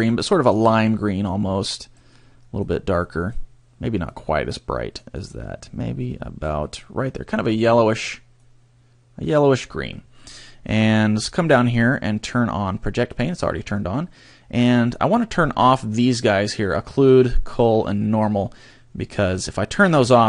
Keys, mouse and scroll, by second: 2.6 click, 4.1 click, 8.3 click, 11.1-12.1 scroll down 9, 16.6 click, 17.5 click, 18.1 click, 18.6 scroll down 2, 19.4 middle click.